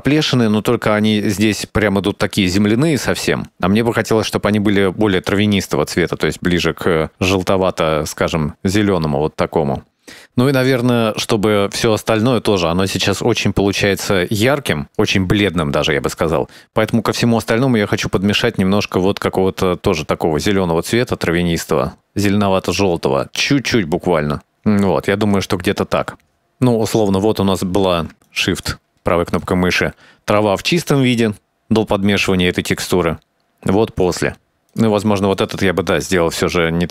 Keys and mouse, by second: 1.6-7.7 drag, 10.6-13.2 drag, 14.2 click, 15.8 click, 16.8 click, 17.1 click, 22.2 shift+middle drag, 26.2 middle click, 27.1 middle click, 28.4 shift+right click, 29.5-30.6 drag, 33.2-34.3 drag, 35.2 middle click, 36.0 click, 36.4-36.9 drag.